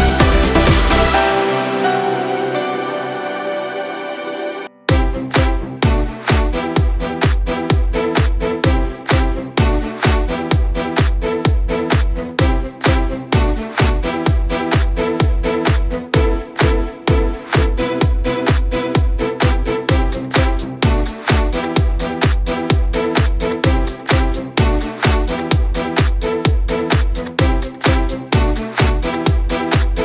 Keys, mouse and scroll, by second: 0.7 click, 1.5 KP_7, 4.1 Escape, 4.6 click, 5.4 shift+click, 6.5 s, 8.5 g, 11.4 click, 11.9-12.3 scroll up 1, 12.3 shift+click, 13.4 g, 19.3 click, 20.2 shift+click, 21.1 g, 24.0 click, 24.3 scroll down 1, 24.5-26.8 middle drag, 26.8 click, 28.6 shift+click, 29.0-30.0 middle drag.